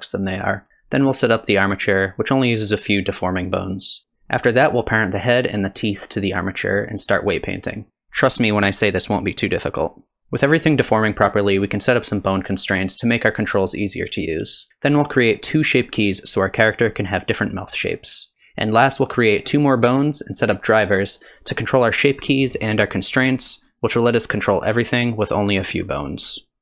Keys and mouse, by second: 2.5 shift+d, 2.5 r, 4.0 KP_3, 4.1 click, 4.6 click, 4.8 shift+click, 5.4-6.6 drag, 6.7 click, 6.8 click, 7.4 click, 7.9 r, 10.0 r, 10.2 r, 14.7-19.3 drag, 18.3 r, 19.6 click, 20.6 middle click, 21.2 r, 23.0 click, 23.6 click, 24.9 r.